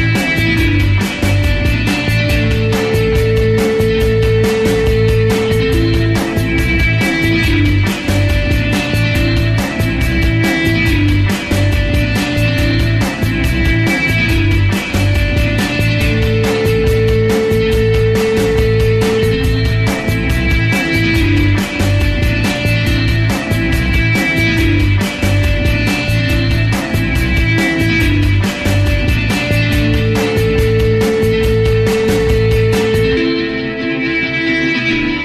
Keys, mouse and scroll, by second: 0.0 alt+middle click, 0.4-3.4 ctrl+drag, 3.7 alt+click, 4.0 alt+middle click, 4.2-5.7 ctrl+drag, 5.7 g, 5.8 f, 5.9 click, 6.8 shift+c, 7.0 f, 7.2-8.2 ctrl+drag, 8.5 alt+click, 9.3 ctrl+z, 9.5-10.9 ctrl+drag, 10.9 alt+right click, 11.0 alt+click, 11.5 alt+middle click, 11.7 alt+click, 11.8 alt+right click, 12.2-13.4 alt+drag, 13.4 ctrl+z, 13.4-14.9 ctrl+alt+drag, 14.9-17.1 typing, 15.1 click, 15.3 click, 15.8 click, 16.5 click, 17.2 ctrl+click, 17.7 ctrl+z, 17.8-18.8 ctrl+drag, 18.9-20.8 ctrl+drag, 20.8 alt+middle click, 20.9-22.3 alt+drag, 22.5 ctrl+alt+click, 23.4 alt+middle click, 23.5 alt+right click, 23.8-24.8 ctrl+drag, 25.0 ctrl+click, 25.7 alt+right click, 25.9 alt+click, 26.2 alt+middle click, 26.5 f, 26.8 click, 27.4 f, 27.6 alt+right click, 27.7 ctrl+z, 28.1 click, 28.5 ctrl+z, 28.6 right click, 29.0-30.4 drag, 30.4 alt+right click, 30.5 alt+middle click, 30.8 alt+right click, 31.1-32.4 drag, 32.4 alt+right click, 32.5 alt+middle click, 32.7 alt+click, 33.1 alt+middle click, 33.2 alt+click, 33.4 alt+middle click, 33.7 alt+click, 34.6 ctrl+z, 34.8 click.